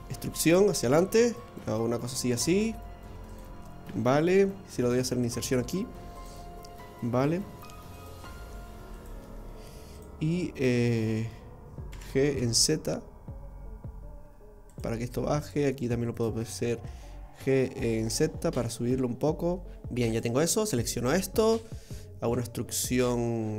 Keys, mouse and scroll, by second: 3.6 middle click, 4.6 i, 6.8 middle click, 7.9 right click, 8.9 shift+right click, 9.9 click, 11.9 g, 15.4 right click, 16.2 shift+right click, 17.4 g, 19.8 middle click, 20.1 click, 20.7 right click, 21.1 middle click, 22.3 e.